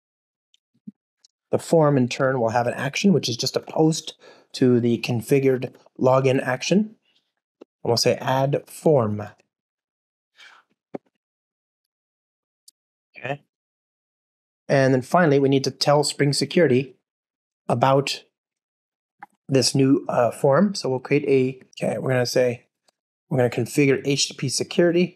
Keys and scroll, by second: 8.8 Return, 9.4 alt+super+l, 10.8 super+BackSpace, 21.7 ctrl+o, 23.1 Down.